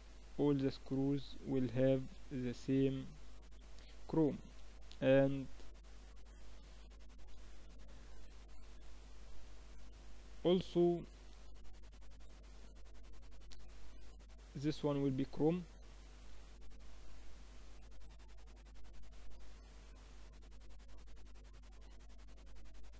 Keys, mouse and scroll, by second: 6.9 Tab, 7.7 a, 8.9 Tab, 8.9 a, 13.4-15.3 drag, 15.8 Tab, 16.5 Tab, 17.5-19.1 middle drag, 18.1 Tab, 18.7 Tab, 19.5 Tab, 20.6 a, 21.8 Tab, 22.1-22.9 middle drag.